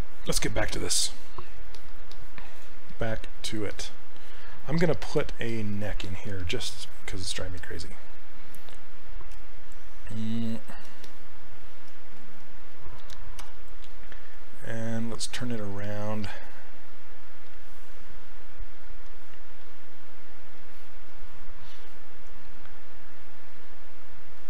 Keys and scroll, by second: 13.5 e.